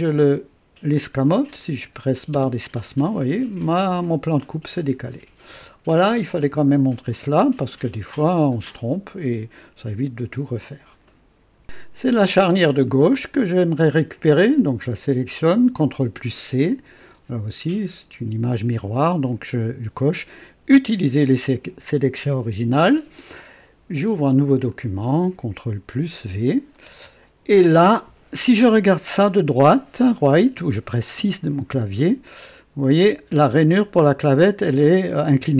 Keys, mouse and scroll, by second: 0.1 click, 1.6 click, 2.3 space, 2.9-6.9 drag, 7.2 scroll up 1, 7.9 right click, 8.7 click, 9.8 click, 12.8 click, 14.3 click, 15.8 ctrl+c, 21.6 click, 24.6 click, 25.6 ctrl+v, 26.7-27.4 ctrl+right drag, 29.1 click, 31.1 KP_3, 32.0-33.3 drag, 34.4-35.1 drag.